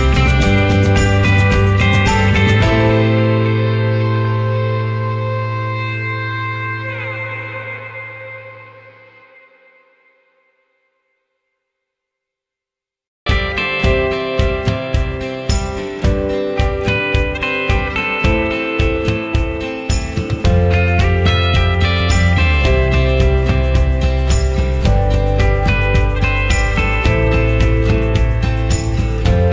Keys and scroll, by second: 11.2 ctrl+z, 15.5 ctrl+z.